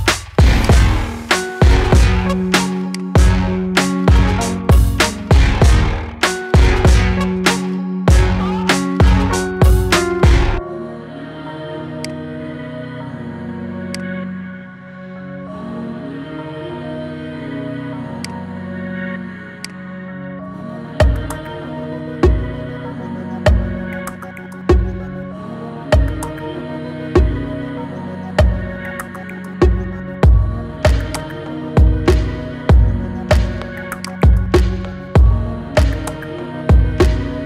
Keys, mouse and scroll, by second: 1.7-2.8 scroll down 4, 2.8-3.8 drag, 3.8-4.8 scroll down 3, 4.8-7.5 shift+drag, 7.5 KP_1, 8.9 KP_3, 9.5-10.7 scroll up 4, 10.7-11.8 shift+middle drag, 11.8-13.2 shift+drag, 13.2-13.8 scroll down 4, 13.8 click, 14.6 scroll down 4, 16.1-17.5 scroll up 8, 17.5-18.0 scroll up 1, 18.0 click, 19.5-21.2 shift+drag, 21.2 scroll up 1, 21.5-22.2 shift+middle drag, 22.2-22.7 scroll down 5, 25.1-26.5 shift+middle drag, 26.5-27.0 scroll up 1, 27.0-27.4 scroll down 1, 27.4-29.4 shift+middle drag, 29.4 g, 31.6 g.